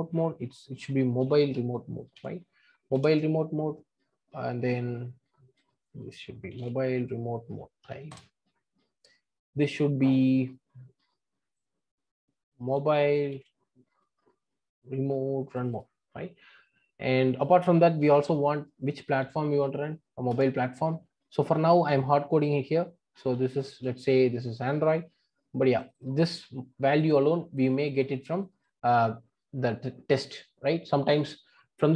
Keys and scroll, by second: 2.9 Return, 20.3 Return, 22.3 Return.